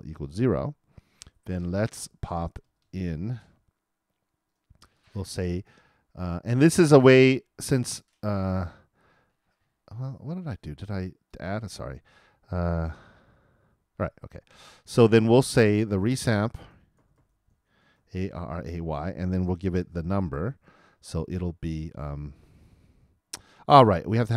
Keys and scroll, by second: 17.6-18.7 typing.